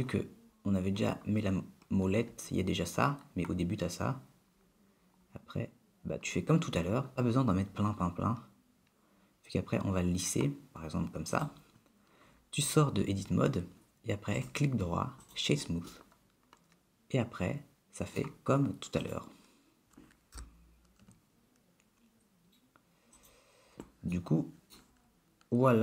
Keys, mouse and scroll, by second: 13.2 Tab, 14.6 right click, 16.1 middle click, 19.2 click, 20.6 g, 24.3 middle click.